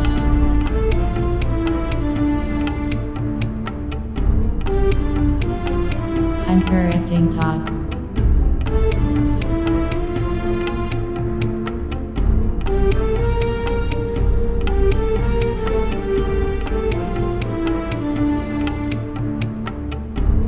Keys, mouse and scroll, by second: 0.2 z, 0.9 b, 1.9 middle click, 3.6 g, 4.7 click, 5.2 e, 5.8 g, 6.6-8.7 drag, 7.1 z, 7.5 Tab, 8.7 middle click, 8.9 click, 9.5-12.0 middle drag, 14.4 Tab, 14.6-15.9 middle drag, 15.1-18.2 right drag, 16.4 click, 17.5 middle click, 17.8 middle click, 17.9 middle click, 19.9 Tab.